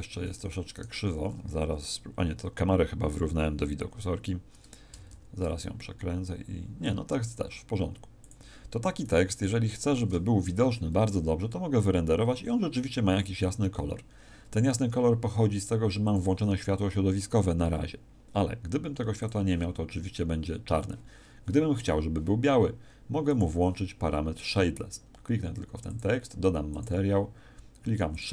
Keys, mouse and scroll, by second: 0.7 right click, 5.0 shift+f, 8.2 click, 9.0 right click.